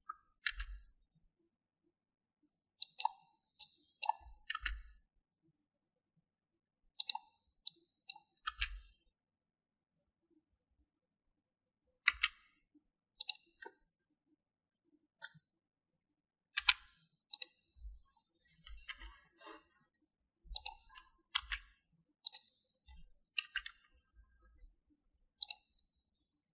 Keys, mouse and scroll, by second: 1.5 g, 4.6 click, 5.5 g, 8.6 click, 9.4 g, 14.6-16.2 middle drag, 17.7 3, 18.3 click, 19.9 i, 22.3 e, 23.2 e, 24.4 KP_1, 26.4 click.